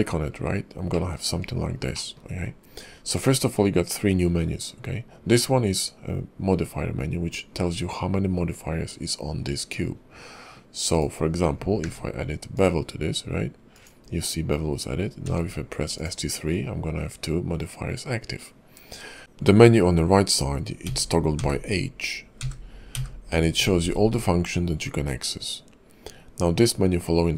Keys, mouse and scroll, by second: 0.2 scroll down 4, 0.9 middle click, 1.3-1.6 scroll up 3, 1.9 shift+middle click, 11.8 q, 15.2 q.